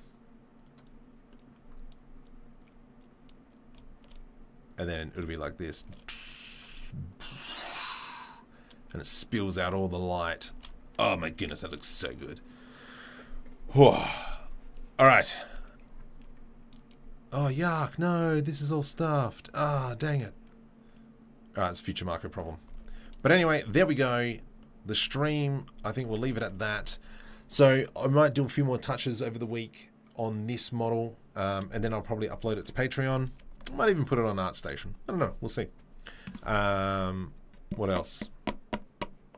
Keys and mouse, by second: 0.5 click, 0.6-2.7 middle drag, 2.7-24.9 drag, 5.9 shift+space, 8.7 r, 10.6 shift+space, 11.7 ctrl+s, 13.6 r, 22.9 ctrl+s, 24.9-32.6 right drag, 25.7 s, 26.7 ctrl+s, 32.6 shift+click, 33.1 ctrl+right click, 33.9 ctrl+s, 33.9-39.3 drag.